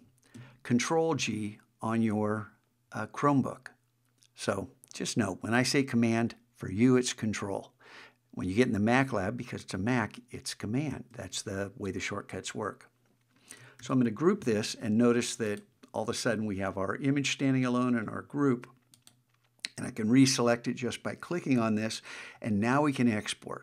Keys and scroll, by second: 13.8 super+g.